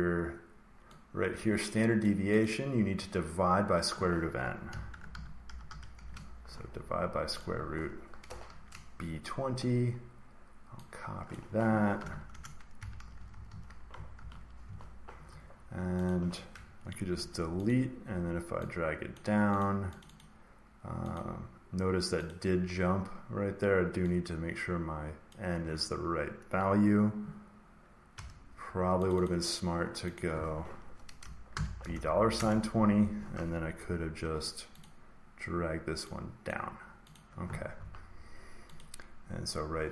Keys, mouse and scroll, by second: 1.9 click, 2.4 click, 4.4-6.4 typing, 7.3 click, 11.3 click, 11.9 ctrl+c, 12.2 Return, 13.1 Return, 13.2 Return, 13.4 Right, 14.1 ctrl+v, 14.6 Down, 16.0 click, 17.1 Delete, 17.6 click, 19.1 click, 19.5 click, 19.9 click, 20.1 click, 21.1 click, 22.2 click, 25.2 click, 28.1 Return, 29.0 click, 29.2 click, 30.1 click, 31.4 typing, 32.3 Return, 34.1 Delete, 34.7 click, 36.4 click, 37.1 click, 38.7 click.